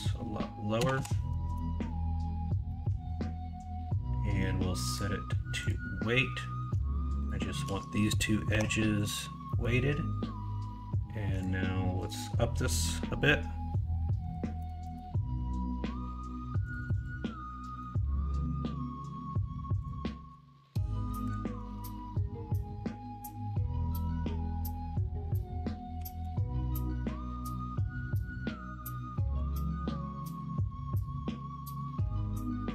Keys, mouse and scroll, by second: 0.9-2.3 drag, 0.9 KP_0, 2.6 middle click, 2.9 alt+z, 5.0 click, 8.4 q, 9.4 middle click, 11.4-16.7 drag, 16.7 click, 17.6 middle click, 21.2 Left, 21.2-28.2 drag, 21.6 Right, 28.2 middle click, 30.5 Tab, 32.0 Tab.